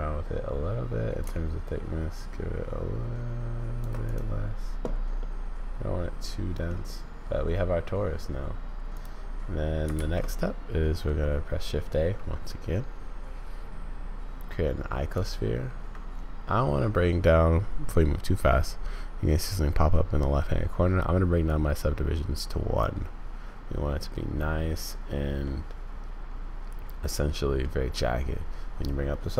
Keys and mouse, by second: 1.2-3.9 shift+drag, 5.2-6.7 middle drag, 9.9 shift+a, 21.5-22.8 drag, 25.5-27.7 drag, 28.8 click.